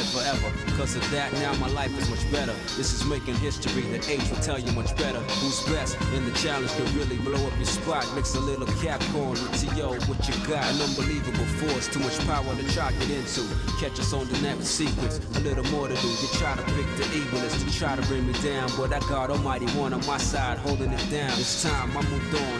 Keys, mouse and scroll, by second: 0.6 shift+middle click, 1.8 scroll up 1, 2.8 scroll up 1, 3.4 scroll up 1, 3.8-4.4 scroll down 2, 4.6-5.9 shift+middle drag, 6.3-7.8 shift+middle drag, 8.1 middle click, 8.6 shift+middle click, 9.0 middle click, 9.5 middle click, 10.0 middle click, 11.1 click, 11.7 shift+middle click, 12.3 middle click, 13.4 shift+click, 13.9 shift+middle click, 14.4 middle click, 15.0 shift+middle click, 15.7 shift+click, 16.3 middle click, 17.4 shift+click, 18.7 x.